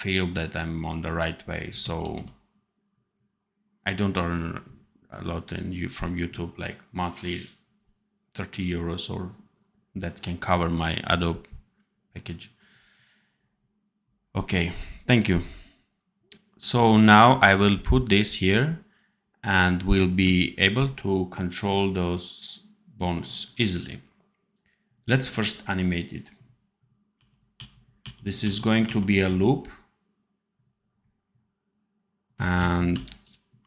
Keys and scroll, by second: 1.9 ctrl+s, 27.0 r, 28.4 r, 29.2 r, 32.5 ctrl+c, 32.8 ctrl+v.